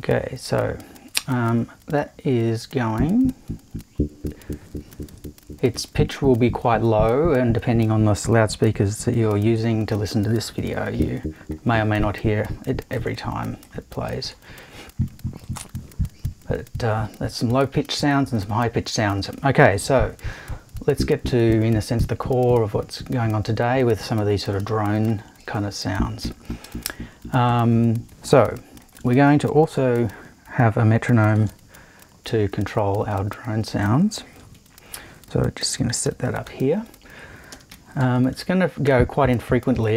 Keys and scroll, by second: 31.3 shift+super+t, 34.5 super+i, 35.5-38.0 typing.